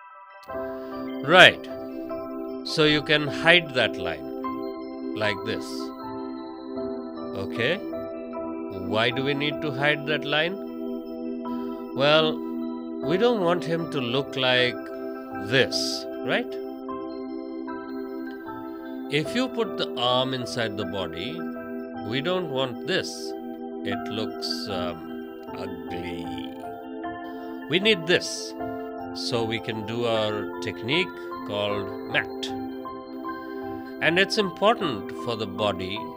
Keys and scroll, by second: 0.5 space, 5.5 ctrl+z, 7.7 space, 10.7 space, 16.4 space, 24.3 ctrl+z, 25.1 space, 29.3 space.